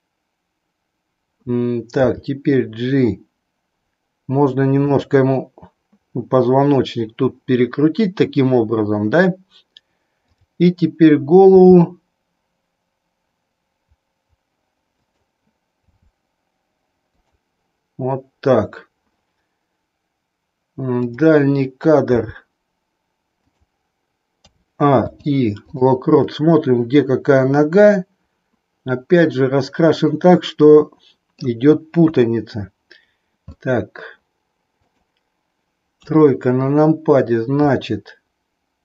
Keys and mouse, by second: 1.9 g, 4.9 click, 10.3 click, 11.7 g, 15.9 r, 22.1 g, 24.5 a, 25.0 i, 26.3-31.5 middle drag, 32.1 KP_3, 33.5 middle click, 34.8 click, 36.0 KP_3, 37.7 middle click, 37.9 middle click.